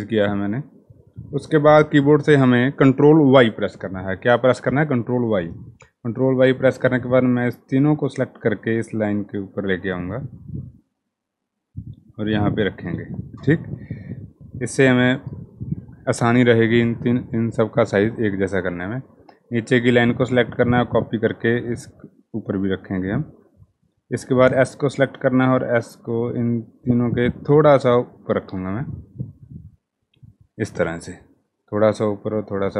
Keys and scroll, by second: 1.5 ctrl+y, 12.3 Down, 13.3 Down, 28.0 Down, 28.2 Down, 28.3 Down, 28.5 Down, 28.7 Down, 29.1 Down, 29.3 Down, 29.5 Down.